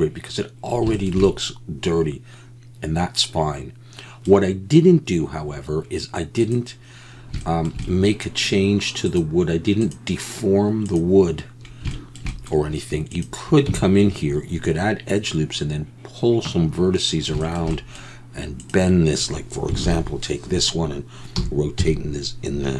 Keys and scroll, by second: 13.7 Tab, 19.8 ctrl+l, 21.3 r, 21.8 x.